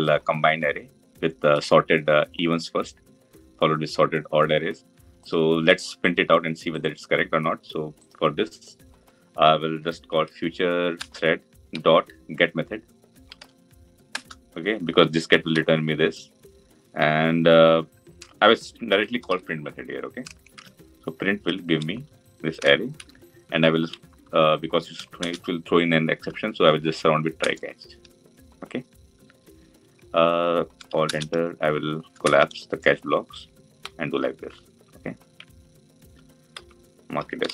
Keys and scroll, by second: 10.8 Return, 25.1 alt+Return, 30.9 alt+Return.